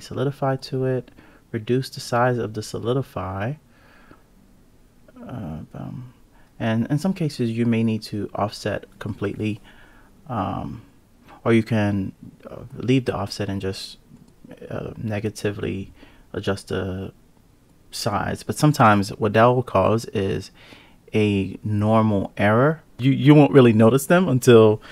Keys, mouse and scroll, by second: 1.3-1.7 drag, 3.6-4.7 drag, 5.3 click, 7.9-9.9 drag, 9.9 KP_0, 11.6 click, 12.2 click, 14.3 alt+z, 14.6 click, 15.2 click, 16.3 click, 19.6-20.6 scroll down 4, 20.6 click, 21.1 click, 22.0 click, 23.0 Tab, 23.3 ctrl+r.